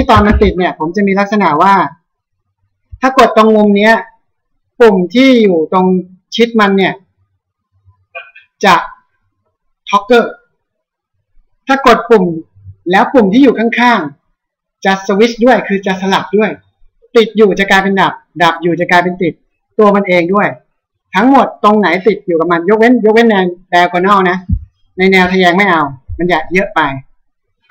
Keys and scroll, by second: 0.3 ctrl+s.